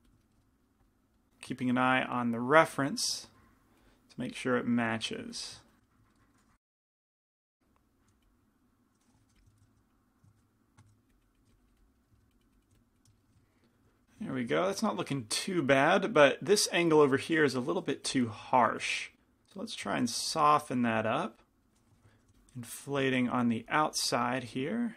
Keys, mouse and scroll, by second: 0.7 right click, 4.0-6.3 drag, 6.3 middle click, 6.7-8.1 typing, 7.8 click, 7.8 middle click, 8.5 click, 9.4 f, 9.4 i, 10.0 click, 10.0 middle click, 10.7 ctrl+z, 10.8 shift+f, 11.3-13.8 drag, 11.5 f, 12.0 middle click, 12.4 middle click, 12.8 f, 14.7 middle click, 18.1 g, 18.1 f, 18.9 f, 19.3-21.2 drag, 22.2 i, 22.4 f, 23.1-24.9 drag.